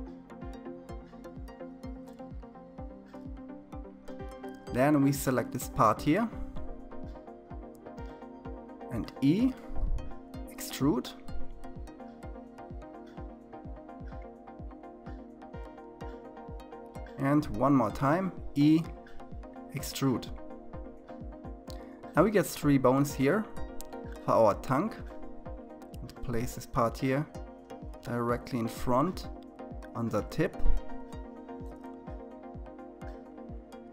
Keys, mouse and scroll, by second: 0.1-2.1 scroll down 4, 2.1-2.6 scroll down 1, 2.6-6.1 shift+middle drag, 6.1 click, 7.0 e, 16.6 e, 20.5-22.0 scroll up 4, 22.0-24.4 shift+middle drag, 24.4 g, 30.7-32.0 scroll down 6, 32.0-33.4 shift+middle drag, 33.4-33.9 scroll up 2.